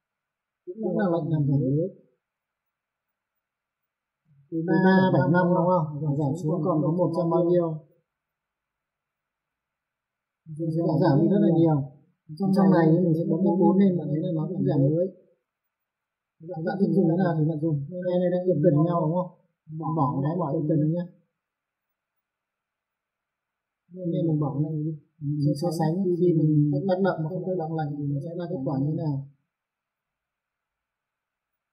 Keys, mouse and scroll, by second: 2.5 click, 4.2 click, 6.8 click, 11.1 click, 13.5 F4, 14.2 middle click, 14.9 click, 15.4 middle click, 17.7 click, 20.3 click, 23.1 click, 24.6 right click, 24.9 click, 26.5 click, 28.5 click, 31.1 click.